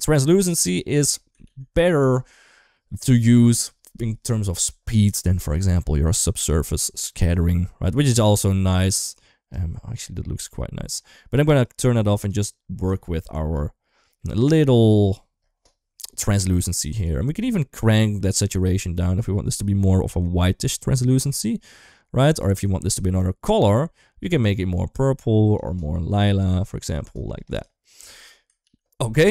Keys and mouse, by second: 1.7 ctrl+s, 1.9 shift+middle drag, 5.3 middle click, 6.3-9.3 drag, 11.4-12.0 drag, 12.7 shift+middle click, 13.8 shift+middle click, 18.4-22.2 shift+drag, 22.4 shift+middle click, 23.0-25.3 shift+drag, 25.7 middle drag, 26.8 middle drag, 27.3 click, 28.4 ctrl+s.